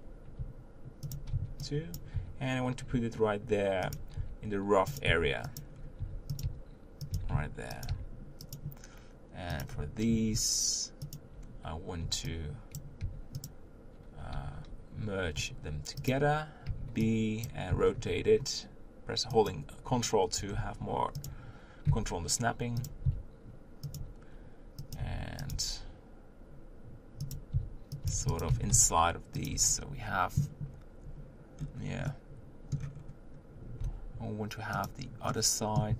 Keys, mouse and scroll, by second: 1.9 b, 2.1 g, 4.2-7.9 typing, 9.6 click, 11.1 shift+click, 12.8 b, 13.0 g, 14.5 g, 17.5 b, 17.7 r, 20.5 r, 21.9 g, 23.0 s, 24.0 g, 25.0 s, 25.5 g, 27.5 s, 28.0 g, 28.5 s, 29.6 Tab, 30.0-30.7 scroll up 1, 31.6 scroll down 4, 32.0 middle click, 32.9-33.8 scroll up 3, 33.8 Tab, 34.8 click, 35.3-35.9 middle drag.